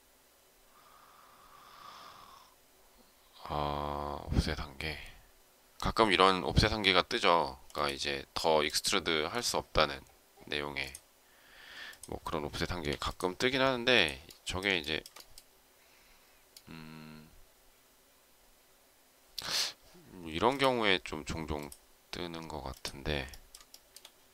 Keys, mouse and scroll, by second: 14.7 shift+middle click, 23.6 shift+middle click.